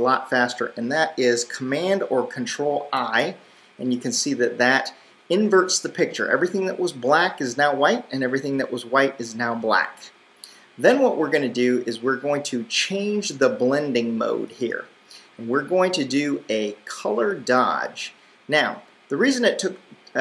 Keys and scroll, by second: 3.0 super+i.